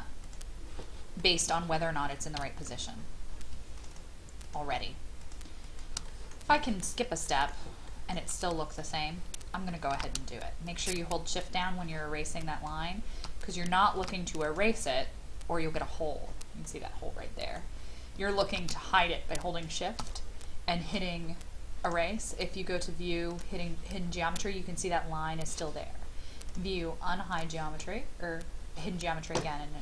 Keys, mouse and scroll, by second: 1.2-2.3 middle drag, 2.3 e, 2.6-3.5 scroll up 1, 3.8 shift+click, 4.4 shift+click, 5.2 shift+click, 5.6 shift+click, 6.0 middle click, 7.2 shift+middle click, 7.9 shift+middle click, 8.8 click, 9.9 ctrl+z, 10.6 shift+click, 12.4 shift+click, 14.0 ctrl+z, 14.4-15.4 drag, 15.9-16.6 scroll up 1, 16.6 middle click, 18.5 ctrl+z, 19.0 shift+click, 21.8 click, 27.9-28.8 scroll down 2.